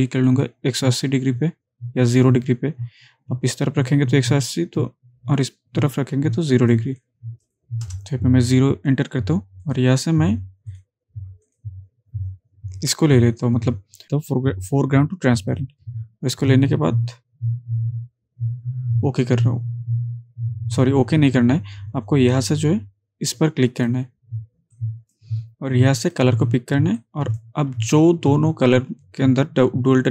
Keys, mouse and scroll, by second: 0.3-6.9 drag, 14.0 click, 15.6 click, 23.8-25.4 drag.